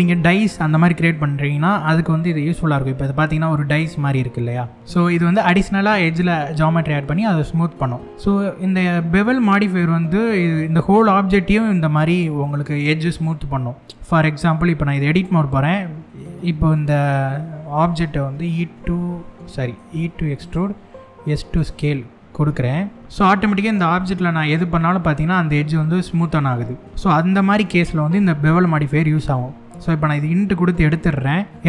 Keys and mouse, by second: 0.7-1.2 middle drag, 1.6-2.2 shift+middle drag, 6.1-6.6 middle drag, 14.4 Tab, 20.0 click, 20.4 s, 21.2 click, 22.4 Tab, 23.6-27.3 middle drag.